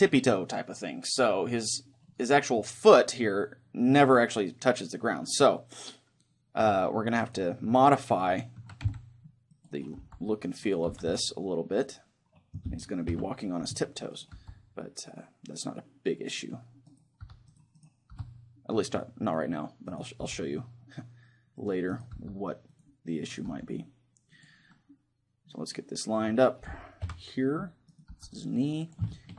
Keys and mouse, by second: 5.6-7.3 middle drag, 7.3-8.6 right drag, 8.6 a, 9.5 c, 9.9 right click, 10.0 g, 10.9 r, 12.7-13.7 right drag, 13.1 KP_3, 14.2-15.9 right drag, 14.4 g, 16.4-19.3 drag, 16.9-18.1 right drag, 17.3 g, 18.1 g, 19.3 right click, 19.6 click, 20.2 g, 21.1 click, 21.5 right click, 21.7 click, 22.2 g, 23.5 g, 24.7-26.2 drag, 26.2 middle click, 27.1 KP_3, 27.9-29.3 right drag, 28.1 g, 28.9-29.3 drag, 29.1-29.3 middle drag.